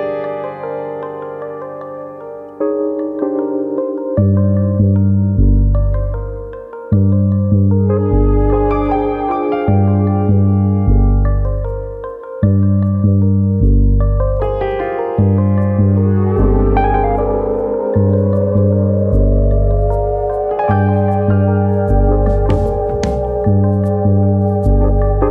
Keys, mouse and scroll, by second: 0.2 alt+shift+click, 1.6 alt+shift+click, 3.7 shift+middle click, 4.4 middle click, 4.9 alt+shift+click, 5.6 ctrl+z, 5.9 alt+shift+click, 8.9-9.3 scroll down 3, 9.2 middle click, 9.5 scroll up 2, 9.7 shift+middle click, 10.0 middle click, 10.3 shift+middle click, 10.5-10.8 scroll up 1, 11.1 middle click, 11.1 scroll up 1, 11.5 shift+middle click, 11.9 scroll up 2, 12.3-13.0 scroll down 4, 13.0 middle click, 13.7 ctrl+e, 14.9-15.7 scroll up 4, 15.3 middle click, 15.7 shift+middle click, 16.0 scroll up 2, 16.3 middle click, 17.0-17.5 scroll up 1, 17.6 shift+middle click, 18.4 alt+click, 19.5 ctrl+e, 20.4-20.7 scroll down 2, 20.7 middle click, 22.0 alt+click, 22.8 ctrl+e, 24.0-25.0 scroll down 3, 24.4 shift+middle click, 25.0-25.3 scroll up 4.